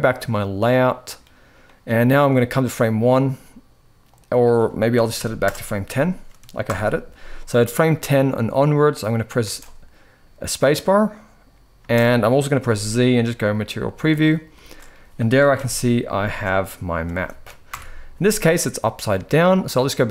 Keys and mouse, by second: 0.5-0.9 middle drag, 1.4 middle click, 2.5 click, 3.8-5.2 drag, 6.4 shift+Left, 9.2 space, 11.5 space, 11.8 middle click, 12.3 z, 14.0-14.3 middle drag, 14.3-16.8 typing, 17.5 shift+Left.